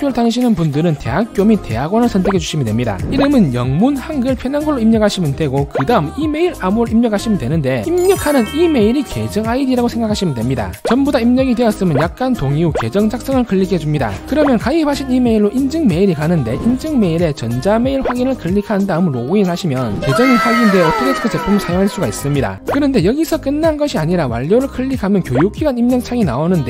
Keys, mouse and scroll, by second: 2.1 click, 3.7-5.5 typing, 5.6 Tab, 7.5 click, 8.1 c, 8.5 click, 8.8 ctrl+v, 9.4 click, 12.0 click, 16.0 click, 17.6 click, 24.1 click.